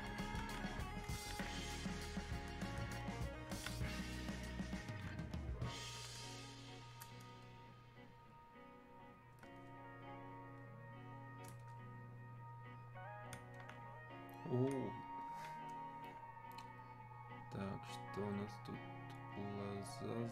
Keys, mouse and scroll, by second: 2.4 alt+click, 7.5 shift+click.